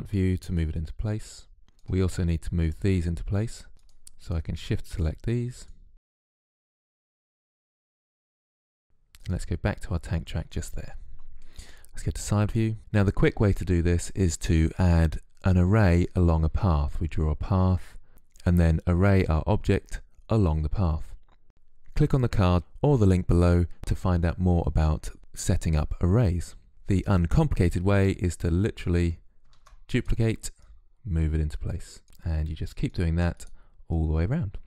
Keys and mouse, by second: 3.7-6.3 drag, 6.3 middle click, 6.6 click, 7.8 click, 9.0-12.1 drag, 12.1 KP_3, 25.2 shift+d, 25.5 click, 25.9 shift+d, 26.1 click, 26.6 shift+d, 26.7 click, 27.6-31.4 typing, 33.1 click, 34.3-34.6 typing.